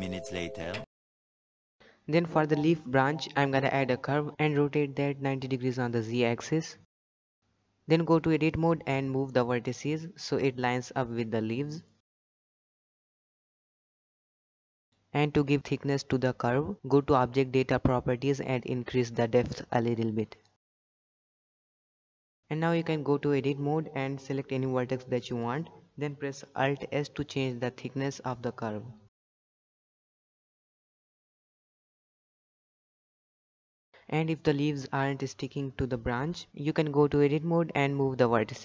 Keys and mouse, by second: 1.1 Tab, 2.2 click, 3.1 shift+middle drag, 3.5 shift+a, 6.8 r, 8.3 shift+middle drag, 8.8 Tab, 9.1 shift+middle click, 9.3 click, 9.6 g, 10.2 g, 10.9 shift+middle click, 11.1 shift+middle click, 11.4 click, 11.5 g, 11.9 shift+middle click, 12.5 shift+middle click, 13.0 g, 13.6 shift+middle click, 13.9 g, 14.3 shift+middle click, 14.5 shift+middle click, 16.9-18.8 shift+drag, 19.0 z, 20.2 alt+a, 21.2-21.6 shift+middle drag, 21.8 shift+middle drag, 22.6 Tab, 23.0 shift+middle click, 23.4 click, 23.7 alt+s, 25.4 g, 29.2 alt+s, 29.3 g, 30.4 shift+middle click, 30.5 shift+middle click, 30.7 shift+middle click, 31.0 g, 31.8 shift+middle click, 32.0 shift+middle click, 32.4 Tab, 32.6 shift+middle click, 33.2 shift+middle drag, 33.5 shift+middle drag, 33.6 click, 33.7 Tab, 34.6 z, 35.7 g, 37.8 z, 38.0 shift+middle click, 38.3 z, 38.4 g.